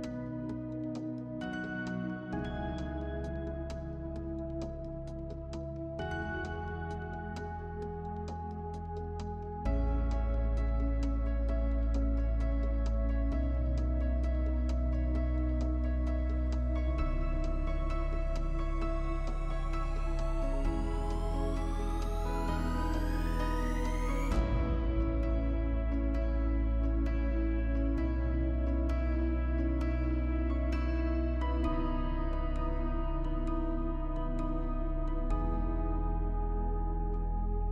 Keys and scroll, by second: 11.2 space, 14.7 space.